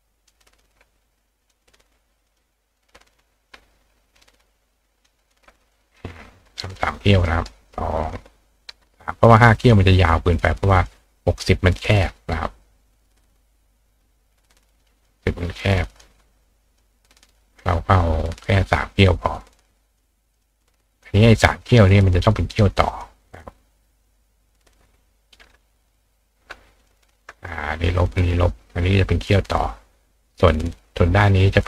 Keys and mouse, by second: 0.3 ctrl+click, 1.4 click, 2.3 click, 3.5-5.0 ctrl+drag, 5.3 ctrl+click, 5.7 click, 7.0-8.1 drag, 7.2 right click, 9.2-9.7 drag, 10.9 click, 15.0 click, 16.8 click, 18.9-20.0 drag, 20.3 click, 20.6-21.0 drag, 22.2 click, 23.3 click, 23.9 click, 25.5 click, 26.8 click, 27.3 click.